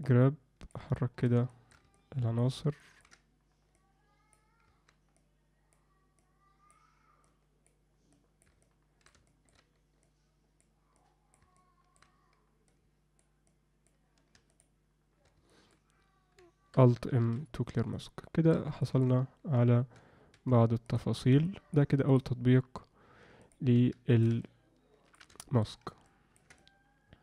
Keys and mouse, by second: 0.0 click, 0.9 middle click, 1.5 alt+shift+middle click, 1.9 alt+middle click, 2.8 ctrl+alt+middle click, 3.7 click, 5.1 click, 6.1 click, 7.2 click, 8.1 click, 8.6 middle click, 9.3 alt+shift+middle click, 10.0 click, 10.9 click, 11.5 middle click, 12.7 click, 13.5 click, 14.5 shift+click, 15.5 alt+middle click, 17.3 alt+m, 17.9 alt+middle click, 18.8 shift+middle click, 21.0 f, 21.4 shift+click, 22.1 shift+click, 23.4 shift+click, 24.1 ctrl+alt+middle click, 24.4 alt+middle click, 25.4 alt+shift+middle click, 26.0 ctrl+alt+middle click, 26.5 middle click.